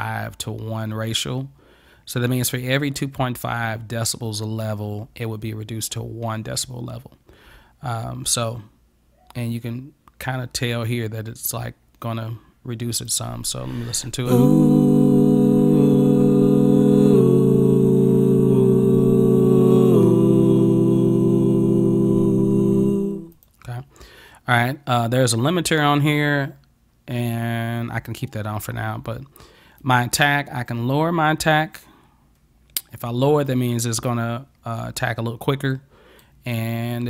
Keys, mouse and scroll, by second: 13.1 click, 23.4 click, 29.9 click, 30.1-36.6 right drag, 35.8 click.